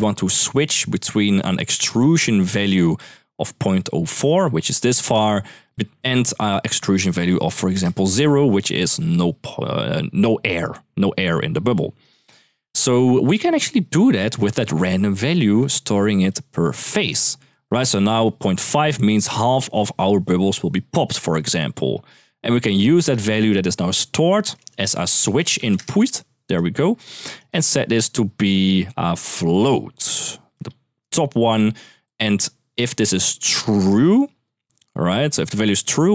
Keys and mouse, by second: 0.6 middle click, 1.6 middle click, 2.4 middle click, 5.4-7.5 drag, 12.0 ctrl+z, 12.5 ctrl+z, 12.9 middle click, 13.3 middle click, 16.0-16.7 drag, 17.5 middle click, 20.7 middle click, 21.3-21.7 drag, 22.0 middle click, 23.8-24.4 drag, 26.2 click, 27.2-30.5 drag, 31.3 click, 31.8 middle click, 33.7 middle click.